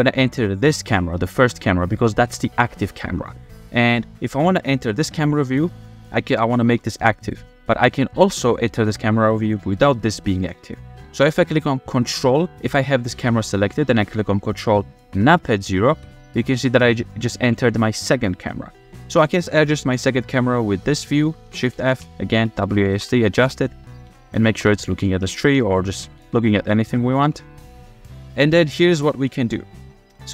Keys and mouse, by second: 1.6 middle drag, 3.4-3.8 shift+middle drag, 5.6 click, 6.7 g, 7.9 click, 8.8 g, 10.0 shift+click, 10.1 shift+middle click, 15.2 ctrl+KP_0, 21.4-26.2 typing, 27.2 w, 28.6 click, 29.5 shift+click, 29.9 click.